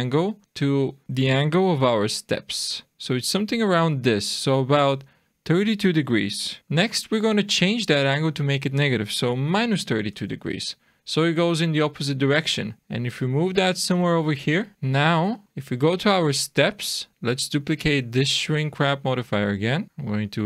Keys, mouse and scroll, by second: 1.7 g, 2.9 r, 4.9 click, 6.6 click, 11.6 middle click, 12.8 click, 14.5 scroll down 2, 14.7 shift+middle click, 15.1 shift+scroll down 1, 15.4 click, 19.2 click, 20.3 click.